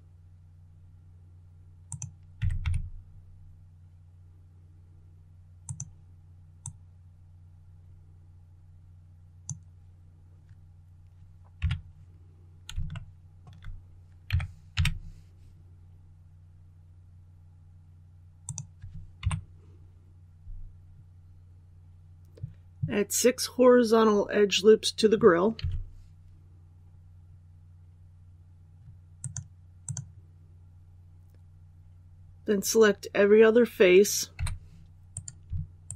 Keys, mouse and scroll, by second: 1.8 click, 2.3 typing, 5.5-10.3 drag, 11.5 KP_3, 12.8 shift+middle click, 14.2 shift+s, 14.6 shift+y, 18.3 click, 19.1 KP_1, 19.3 KP_1, 26.2-27.1 scroll up 1, 29.1 click, 34.2 3, 35.0 right click, 35.7 shift+right click.